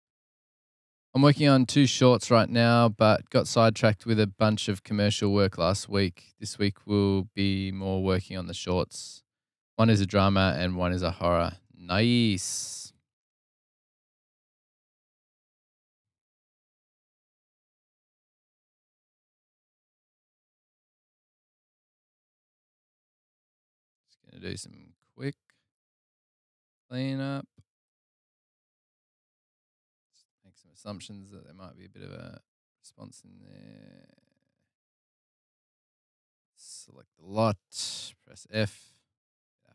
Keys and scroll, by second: 11.4 super+[, 14.2 super+[, 16.6 BackSpace, 18.9 Delete, 22.0 Delete, 24.5 Delete, 26.6 Delete, 28.6 Delete, 32.7 Delete, 35.2 Delete, 38.2 f.